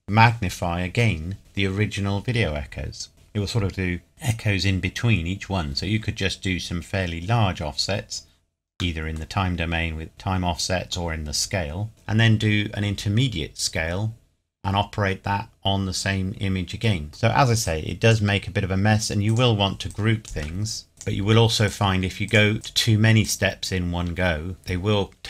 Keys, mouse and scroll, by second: 6.6-7.4 scroll up 1, 8.9 middle click, 16.1-16.9 scroll up 1, 17.1 middle click, 17.6 click, 20.9 shift+click.